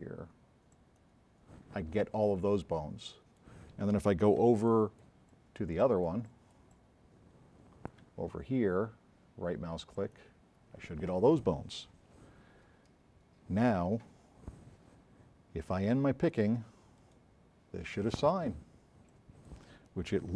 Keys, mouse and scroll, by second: 0.8 middle click, 2.4 s, 2.8 right click, 4.5 s, 4.7 click, 5.3 click, 10.0 middle click, 17.1 right click, 19.1-19.5 drag.